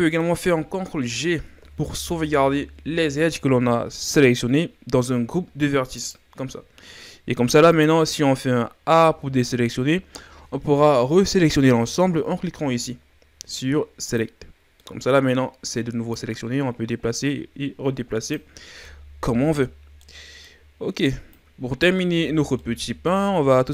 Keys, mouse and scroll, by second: 1.6 ctrl+g, 7.7 click, 8.5-8.9 scroll up 2, 8.9 a, 14.1 click, 14.8-16.2 middle drag, 16.2-18.8 drag, 18.8-21.3 middle drag, 21.3 click, 22.0 Tab, 22.4 scroll down 2, 22.5-23.7 middle drag.